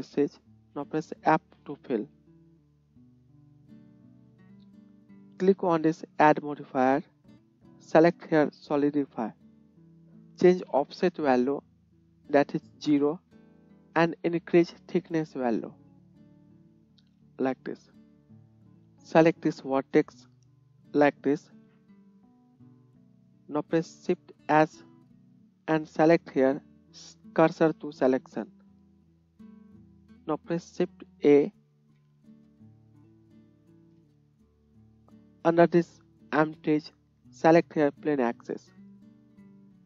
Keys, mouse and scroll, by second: 0.6-6.6 middle drag, 1.5 f, 2.4 Tab, 6.6-11.4 drag, 11.4-12.4 middle drag, 12.4-18.5 drag, 18.5 middle click, 19.4-39.8 drag, 24.6 shift+s, 29.6 Tab, 31.9 shift+a.